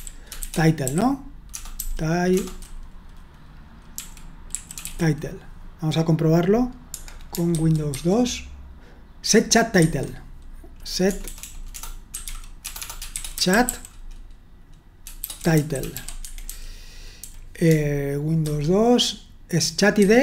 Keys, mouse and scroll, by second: 0.0-2.3 typing, 3.9-6.1 typing, 7.5 super+1, 8.0 super+2, 9.8 super+1, 11.0-17.7 typing, 18.5 super+2, 20.0 super+1.